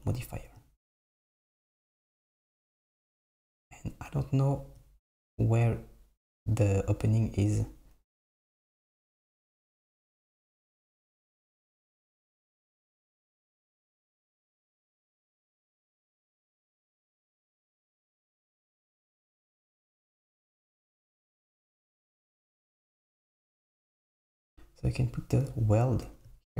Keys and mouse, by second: 1.2 super+middle click, 2.1 super+middle click, 3.1 Tab, 8.3 click, 8.8 click, 10.0 alt+click, 12.6 click, 13.0 alt+click, 17.3 middle click, 20.4 super+middle click.